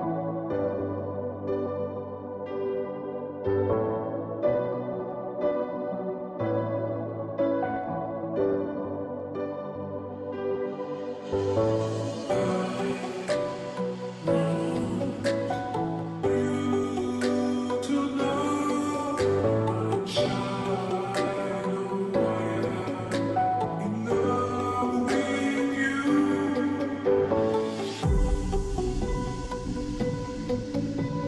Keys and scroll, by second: 4.8-5.6 typing, 14.4 ctrl+j, 25.7-26.1 space, 26.5 space, 29.8 space, 30.1-30.6 space.